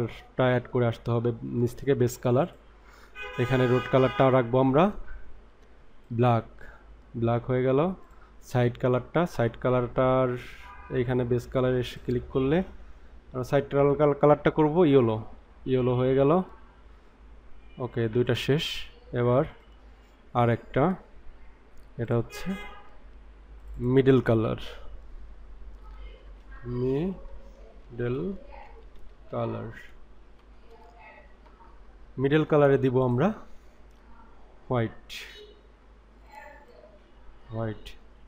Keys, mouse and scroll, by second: 2.3 click, 8.0 click, 12.0 click, 18.2 click, 19.5 click, 22.0 click, 23.5 click, 23.8-31.7 drag, 33.0 click.